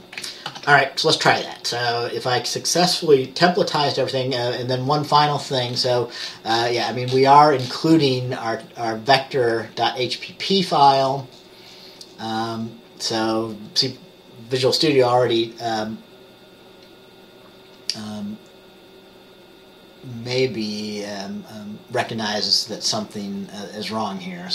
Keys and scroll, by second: 0.6 ctrl+s.